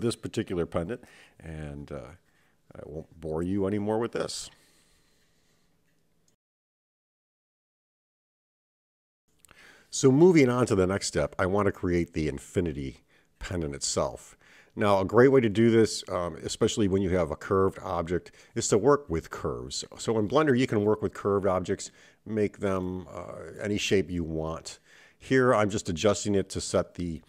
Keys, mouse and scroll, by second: 1.9 shift+click, 2.7 middle click, 4.7 click, 5.4 middle click, 7.0 shift+click, 9.8 click, 11.0 click, 12.6 KP_7, 13.5-14.1 scroll up 4, 15.4 g, 20.9 Tab, 21.6-23.8 scroll down 2, 23.8-24.8 scroll down 2.